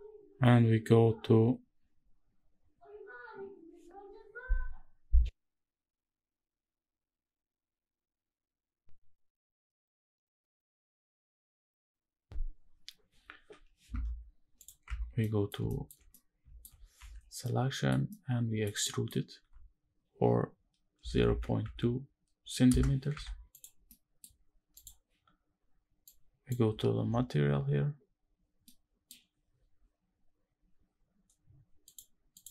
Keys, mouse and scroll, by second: 14.0-14.3 scroll up 2, 14.3 click, 14.6 Tab, 14.9 middle click, 15.4 shift+middle click, 15.8 middle click, 16.6 a, 17.1 middle click, 17.8 middle click, 18.5 middle click, 19.1 e, 20.7 KP_0, 21.0 KP_Decimal, 21.3 KP_2, 22.3 KP_Enter, 22.8 Tab, 23.2 click, 23.5 scroll down 1, 23.6 middle drag, 24.1-24.4 scroll down 2, 24.4 click, 25.8 click, 26.4-27.3 scroll down 1, 27.3 scroll down 1, 31.1-31.6 scroll down 4, 31.6 click, 31.6 middle click, 32.1 click.